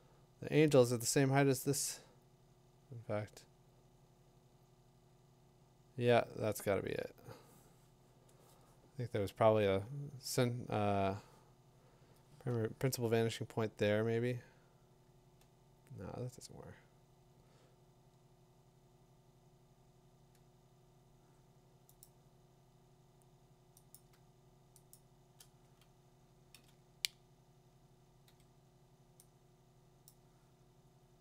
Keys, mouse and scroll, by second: 7.2-10.3 drag, 12.8-22.0 drag, 23.9 click, 24.9 click, 29.4 b, 29.4 d, 30.1 click.